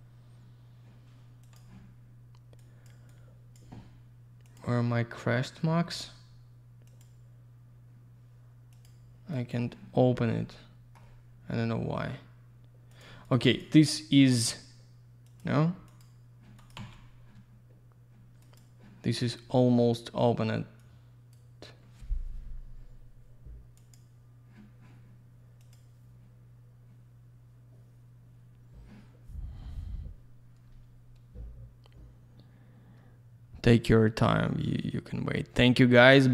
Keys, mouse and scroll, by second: 1.8 click, 2.6 click, 3.1 click, 4.5 click, 4.6 click, 7.2 click, 8.7 click, 8.8 click, 9.3 click, 10.2 alt+middle click, 13.2 click, 13.3 double click, 13.5 click, 13.6 click, 15.3 click, 15.4 click, 15.9 click, 16.0 click, 16.6 click, 16.7 click, 18.4 click, 18.7 click, 20.8 click, 24.1 click, 25.6 click, 25.7 click.